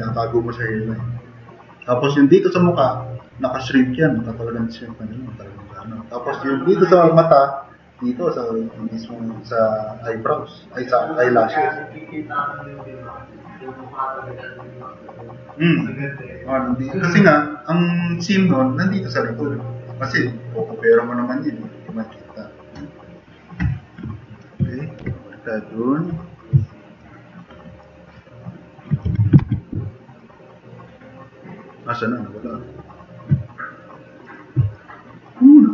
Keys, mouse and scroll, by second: 25.0 v, 26.6 scroll down 1, 27.1 drag, 29.0 4, 29.4 alt+q, 29.7 v, 30.3 click, 33.1 alt+q, 34.7 drag.